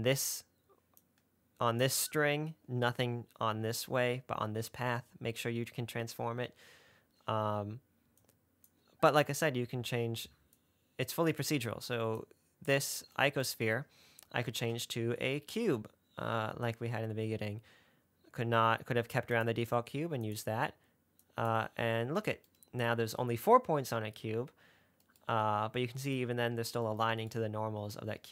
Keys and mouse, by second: 1.3 click, 8.5 click, 10.9-12.3 drag, 12.5 click, 14.9 shift+a, 21.5-22.0 drag.